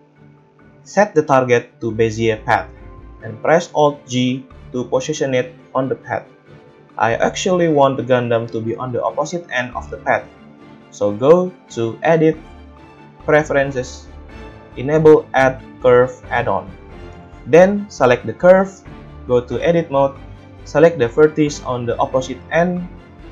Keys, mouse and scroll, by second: 0.8-10.5 middle drag, 4.1 alt+g, 10.5-18.9 drag, 17.9 n, 18.7 middle click, 18.7 right click, 19.7 Tab, 21.3-23.3 drag, 21.3 a, 22.4 middle click, 22.4 right click.